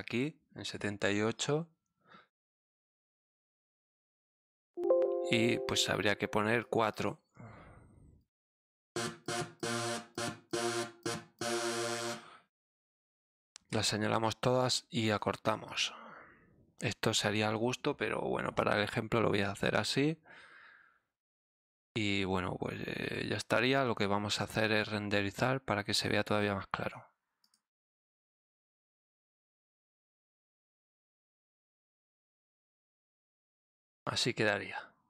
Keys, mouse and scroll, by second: 2.7 click, 4.7 click, 6.6 click, 8.2 click, 8.9 click, 9.2 click, 9.5 click, 10.1 click, 10.5 click, 11.0 click, 11.3 click, 12.4 right click, 13.1 click, 14.4 click, 15.6-16.7 drag, 23.8 click, 24.6 click, 27.4 click, 29.1 click, 30.1 click, 31.0 click, 31.5 click.